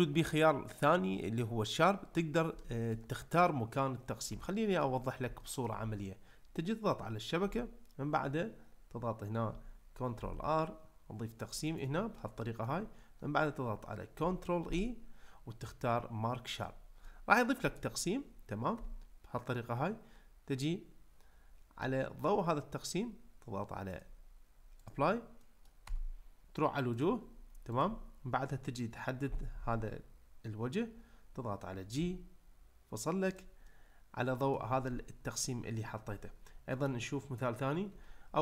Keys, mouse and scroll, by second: 2.6 ctrl+middle click, 4.4-4.8 shift+middle drag, 5.4 ctrl+middle click, 7.5 Tab, 10.2 ctrl+r, 11.7 right click, 12.1 middle click, 14.7 ctrl+e, 17.1-17.8 middle drag, 18.7 Tab, 21.8-22.2 middle drag, 23.9-24.9 drag, 25.4 middle click, 25.9 Tab, 27.7 click, 29.2 l, 32.0 g, 33.7 middle click, 38.0 Tab.